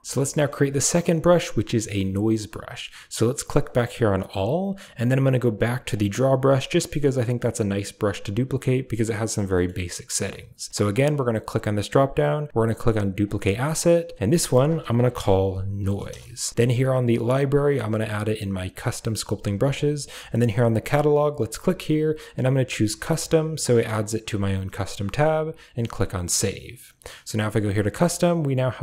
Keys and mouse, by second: 0.3 shift+middle click, 5.8 click, 9.4 shift+middle click, 11.5-25.9 drag.